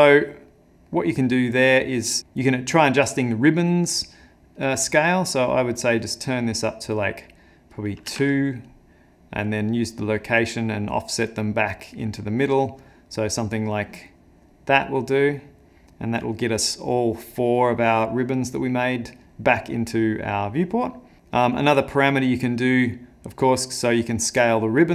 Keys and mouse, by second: 0.5 middle click, 1.1 middle click, 2.2 middle click, 4.6 click, 7.8 click, 9.8 click, 13.9 click, 15.1 click, 17.6 middle click, 21.2 middle click, 21.7 middle click, 22.5 middle click, 24.6 middle click.